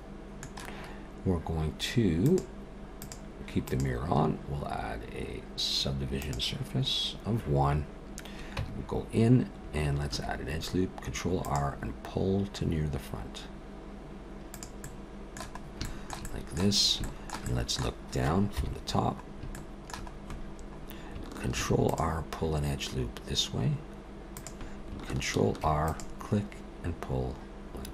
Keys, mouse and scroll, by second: 2.2 click, 3.0 click, 3.7 click, 8.6 Tab, 10.1 ctrl+r, 14.8 middle click, 15.6 scroll up 1, 15.8 shift+middle click, 16.2 middle click, 16.8 scroll up 2, 17.0 middle click, 17.5 middle click, 18.6 KP_7, 19.5 middle click, 20.6-21.2 scroll up 3, 21.5 ctrl+r, 25.5 ctrl+r.